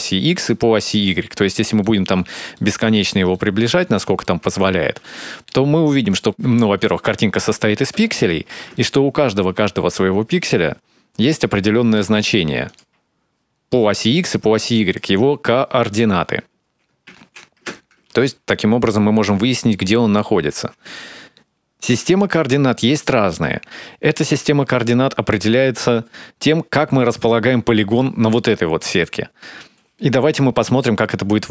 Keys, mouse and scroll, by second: 1.5 ctrl+middle click, 2.0 middle click, 2.8 ctrl+middle click, 3.5 middle click, 5.3 ctrl+middle click, 5.6 shift+middle click, 5.8 ctrl+middle click, 6.6 ctrl+middle click, 7.9 shift+middle click, 9.7 ctrl+middle click, 12.3 ctrl+click, 15.1 click, 17.6 ctrl+z, 18.3 ctrl+shift+z, 19.0 click.